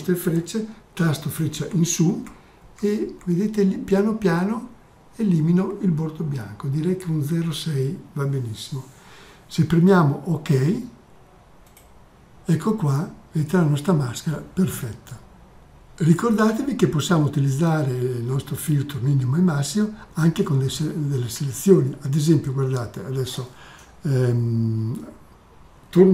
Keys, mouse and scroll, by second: 9.0 click, 16.0 click.